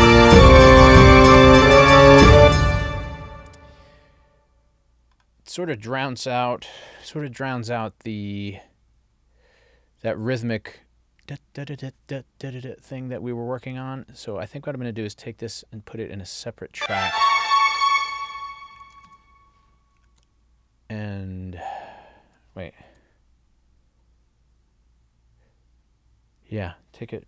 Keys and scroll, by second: 2.3 space, 6.9 ctrl+alt+l, 20.1 super+x, 22.9 super+z.